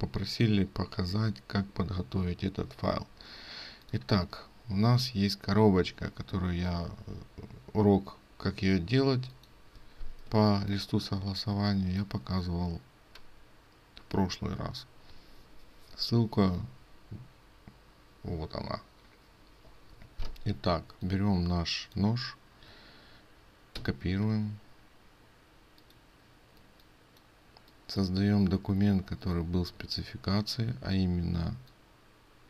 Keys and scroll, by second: 23.8 ctrl+x.